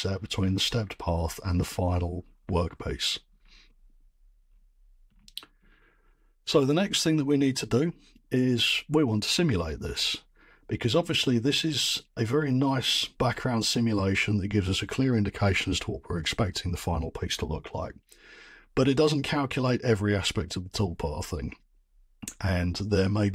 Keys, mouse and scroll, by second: 3.0-3.5 scroll, 4.1-4.9 scroll, 4.9-5.8 scroll.